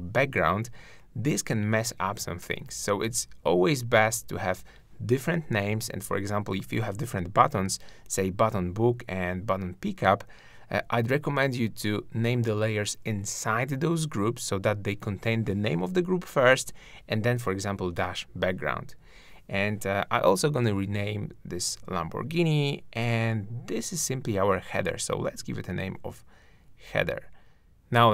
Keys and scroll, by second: 7.7 shift+super+g, 9.7 super+r, 10.8 super+b, 18.4 super+r, 22.3 shift+`, 23.4 super+r, 23.9 super+h.